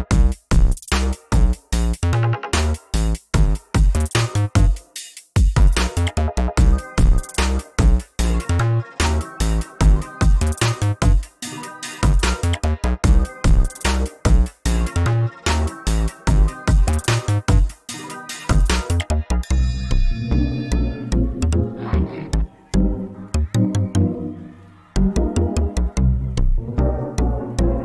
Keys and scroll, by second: 1.5 ctrl+z, 22.5 ctrl+z.